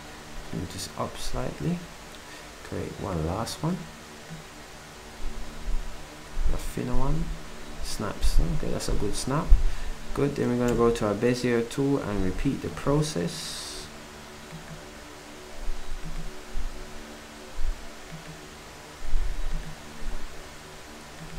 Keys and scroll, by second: 10.7 b.